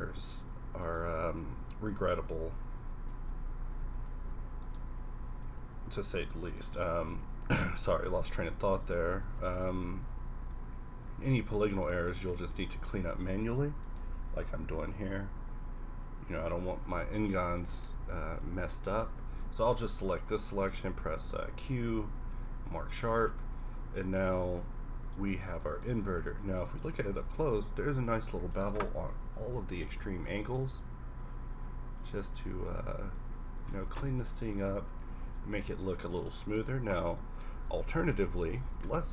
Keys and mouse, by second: 1.6 alt+m, 2.8 a, 3.4 Tab, 3.8 Tab, 5.3 g, 7.0 alt+m, 9.3 alt+m, 10.6 Tab, 11.6 Tab, 14.1 g, 14.3 g, 16.4 middle click, 16.5 middle click, 17.6 middle click, 18.1 shift+`, 20.5 w, 21.3 q, 23.0 Tab, 23.9-26.6 middle drag, 33.6-34.6 middle drag, 34.7 middle click, 35.2 a, 38.0 shift+d.